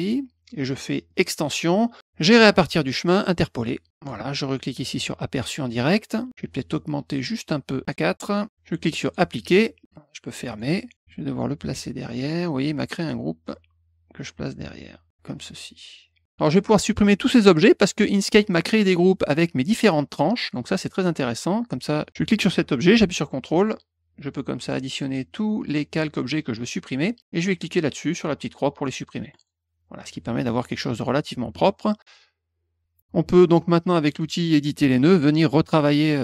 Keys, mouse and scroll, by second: 1.0 click, 3.2 click, 3.9 click, 4.9 click, 7.8 click, 9.0 click, 10.5 click, 13.0-15.1 drag, 16.3 click, 18.4 click, 20.4 click, 22.0 click, 23.4 ctrl+click, 24.1 ctrl+click, 24.6 ctrl+click, 25.0 ctrl+click, 25.5 ctrl+click, 29.3 click, 34.1 click, 34.6 middle click, 35.4 click.